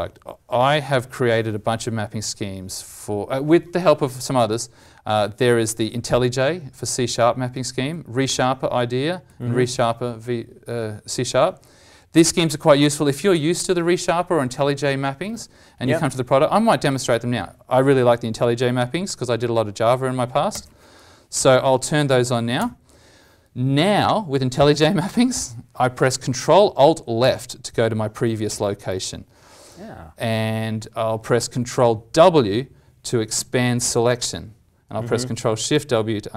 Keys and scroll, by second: 27.2 ctrl+alt+Left, 28.5 ctrl+alt+Left, 31.5 ctrl+Right, 31.6 ctrl+Right, 33.3 ctrl+w, 33.8 ctrl+w, 35.7 ctrl+shift+w.